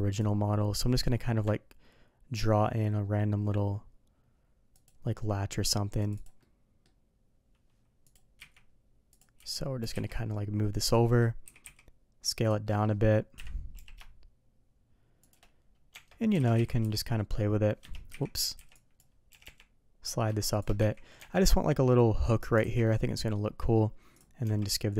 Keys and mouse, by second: 6.4-8.1 middle drag, 9.1 click, 9.4 z, 9.8 g, 11.0 middle click, 11.4 s, 12.6 middle drag, 13.7 g, 15.9 Tab, 16.4 alt+a, 16.5 z, 20.8 z, 21.2 Tab, 21.9-22.2 middle drag, 22.6 alt+a, 22.8-23.3 middle drag, 24.4 Tab.